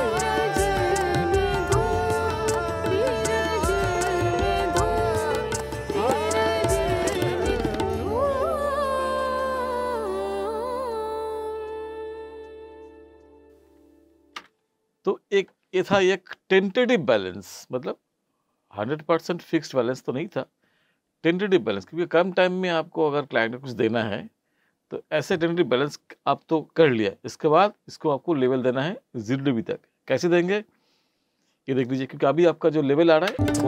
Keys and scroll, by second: 14.3 space, 33.3 space.